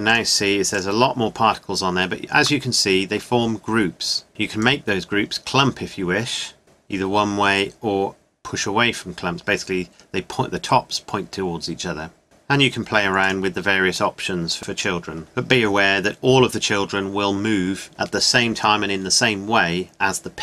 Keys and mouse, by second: 2.4 middle click, 3.0 middle click, 3.6 middle click, 7.8 middle click, 8.4 middle click, 9.9 middle click, 11.0 middle click, 11.7 middle click, 12.2-14.2 middle drag.